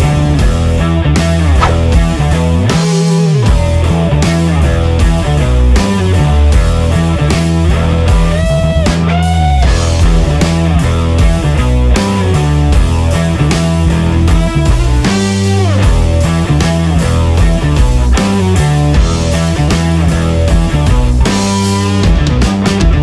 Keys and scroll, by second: 9.3 ctrl+KP_Subtract, 9.3 ctrl+KP_Subtract, 9.4 ctrl+KP_Subtract, 13.4 ctrl+KP_Add.